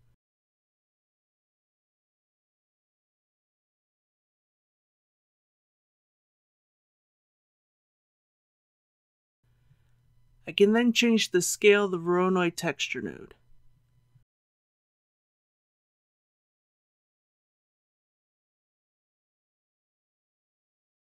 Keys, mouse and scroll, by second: 2.4-3.8 middle drag, 4.4-4.7 scroll up 1, 5.4 shift+middle click, 6.6-7.4 scroll down 1, 14.4 click, 15.2 KP_1.